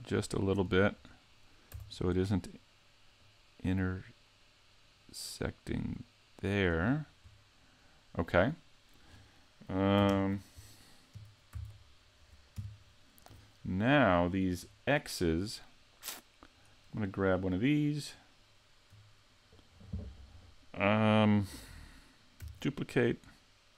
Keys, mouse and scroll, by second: 0.3 shift+middle click, 0.7 scroll up 2, 1.1 middle click, 1.8 z, 3.0 scroll up 1, 3.2 click, 6.9-7.4 scroll down 5, 7.4 middle click, 10.1 ctrl+KP_3, 11.2 KP_5, 11.6 z, 12.6 KP_5, 13.3 a, 14.7 middle click, 16.6 right click, 22.4 shift+d.